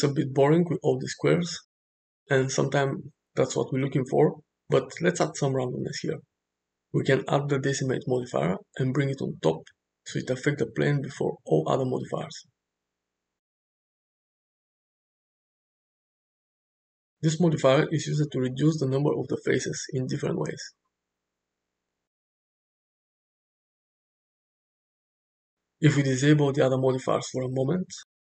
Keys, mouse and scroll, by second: 0.9 shift+middle drag, 1.4-1.9 middle drag, 3.4 click, 4.8 click, 5.4-6.8 drag, 9.2-11.9 drag, 15.6-16.2 middle drag, 18.6-25.0 drag, 26.2 drag.